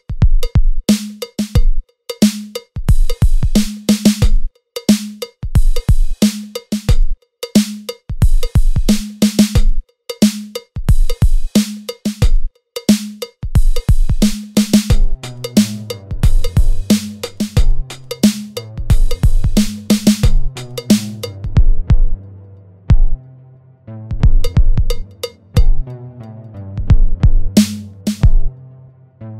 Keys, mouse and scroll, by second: 0.0 shift+middle click, 0.2 Tab, 0.2 shift+middle click, 0.2 scroll up 1, 1.0 ctrl+r, 1.4 Tab, 1.4 middle click, 1.4 scroll down 2, 1.5 middle click, 1.6 middle click, 1.7 scroll up 3, 1.8 click, 1.9 Tab, 2.0 ctrl+r, 2.5 ctrl+r, 2.9 shift+d, 3.4 click, 3.9 click, 4.1 click, 4.2 click, 4.4 Tab, 4.4 click, 4.5 a, 4.8 click, 5.5 middle click, 5.8 middle click, 5.8 scroll down 7, 5.9 middle click, 6.1 e, 6.9 middle click, 7.0 middle click, 7.0 g, 7.2 e, 7.4 middle click, 9.6 middle click, 10.1 middle click, 10.1 e, 10.2 g, 10.5 middle click, 10.5 scroll up 1, 10.6 shift+middle click, 10.6 scroll down 1, 10.7 scroll down 1, 12.5 scroll down 2, 12.6 middle click, 12.6 g, 13.4 scroll down 1, 13.5 middle click, 13.5 scroll up 1, 13.6 middle click, 13.7 g, 14.7 scroll up 1, 14.8 e, 15.5 click, 15.5 alt+click, 15.7 shift+d, 15.8 p, 16.0 Tab, 16.0 click, 16.2 Tab, 16.2 click, 16.3 a, 18.7 scroll down 3, 18.8 scroll up 1, 19.1 middle click, 19.1 scroll down 1, 19.1 g, 19.2 scroll up 1, 19.4 middle click, 19.6 e, 20.1 middle click, 20.2 scroll down 1, 20.4 e, 23.5 s, 23.5 scroll up 1, 25.0 click, 25.2 Tab, 25.2 a, 25.9 click, 28.9 scroll down 1, 28.9 scroll up 2, 29.0 Tab, 29.2 click, 29.2 middle click, 29.3 ctrl+s, 29.3 middle click.